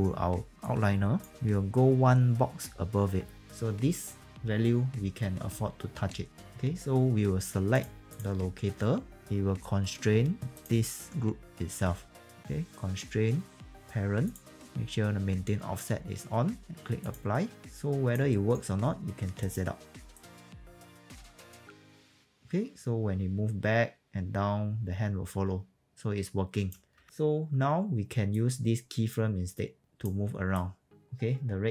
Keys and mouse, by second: 0.4 f, 0.5 click, 3.5 click, 5.6 w, 10.5 ctrl+click, 12.3 click, 14.3 click, 18.2 alt+right click, 19.3 click, 19.8 w, 20.0 click, 26.9 ctrl+z, 27.0 click, 27.4 w, 28.2 click, 30.5 click.